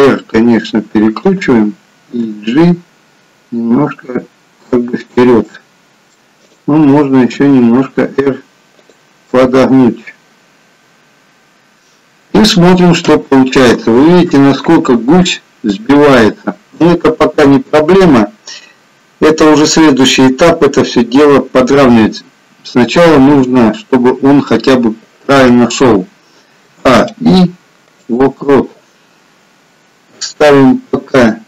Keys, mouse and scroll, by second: 2.4 g, 5.4 middle click, 6.5 click, 7.3 r, 9.2 middle click, 12.0-13.1 scroll down 2, 13.1 KP_1, 14.2-15.0 scroll up 1, 15.0 scroll up 2, 23.3 KP_3, 26.7 a, 27.0 i.